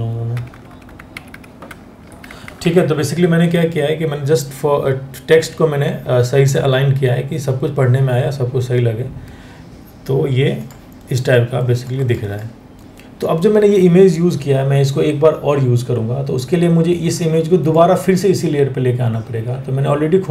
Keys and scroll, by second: 0.3 Up, 0.7 Up, 0.7 Right, 0.9 Right, 1.3 Down, 1.7 Down, 1.9 Down, 2.1 Down, 2.2 Down.